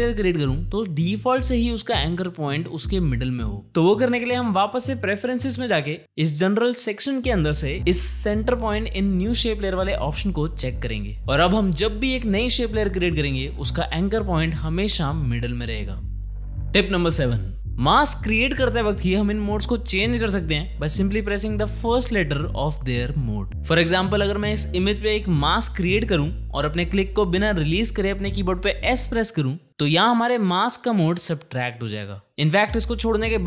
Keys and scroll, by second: 28.9 s, 33.0 Escape.